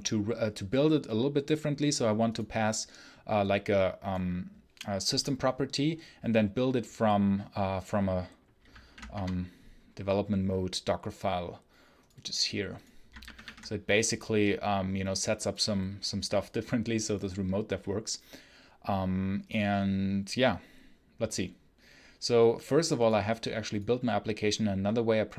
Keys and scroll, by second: 8.7 alt+F1, 9.0 Return, 13.1 alt+1.